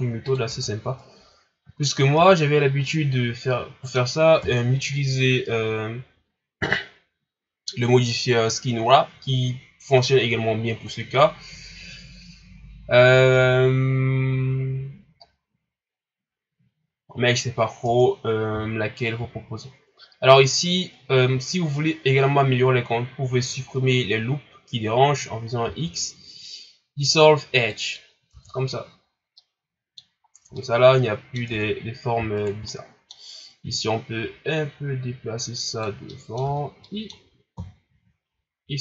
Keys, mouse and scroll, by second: 0.5 Tab, 0.7 scroll down 2, 1.1-1.7 scroll up 1, 1.7 shift+scroll up 1, 2.1 a, 2.5 scroll down 3, 2.9-4.4 middle drag, 4.4 KP_1, 9.9 scroll up 5, 10.6 shift+scroll down 6, 11.0 scroll up 1, 12.6-13.4 scroll down 2, 17.4 scroll up 2, 17.8 Tab, 19.2 x, 25.6 x, 28.3 Tab, 28.8-29.3 scroll down 2, 29.3-30.2 middle drag, 30.2-30.5 scroll up 3, 30.5-31.5 middle drag, 31.5 Tab, 32.3 alt+right click, 32.6-33.7 middle drag, 33.7-36.1 drag, 36.1 middle click, 36.4 Tab, 36.8-37.5 middle drag, 37.5 KP_1, 38.3 scroll down 3.